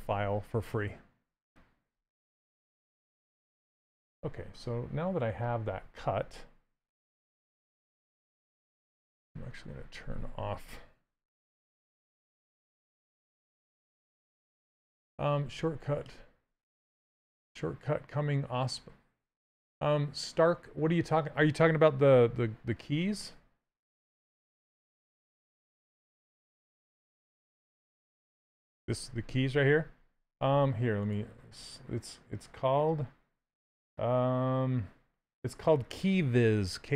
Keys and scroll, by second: 9.5 shift+d, 10.8 Down, 11.8 w.